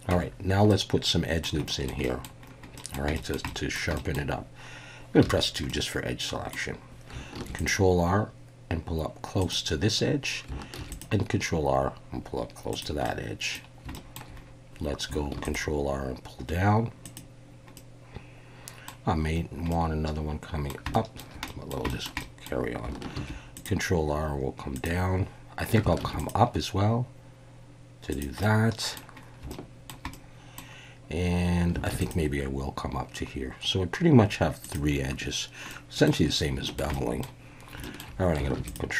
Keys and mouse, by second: 0.1 Tab, 0.7-1.4 middle drag, 1.7 shift+middle drag, 2.0 middle click, 2.7 click, 3.2 shift+click, 3.4 click, 4.0 shift+click, 5.2 2, 5.7-6.5 middle drag, 7.3 ctrl+r, 9.4 click, 10.8 ctrl+r, 12.7 click, 13.0-13.5 middle drag, 13.5 ctrl+r, 13.9 shift+middle click, 15.3 ctrl+r, 17.0 click, 17.8-18.9 middle drag, 19.7-20.7 middle drag, 20.9 shift+middle click, 21.5 middle click, 21.9 shift+middle click, 22.2-22.5 middle drag, 23.1 ctrl+r, 24.7 click, 26.0 ctrl+r, 28.1 click, 28.4 middle click, 29.5-29.9 shift+middle drag, 30.1 middle click, 31.9 ctrl+r, 34.6 click, 35.7-36.1 middle drag, 36.7 shift+middle click, 36.9 middle drag, 37.8 shift+click, 38.6 ctrl+r.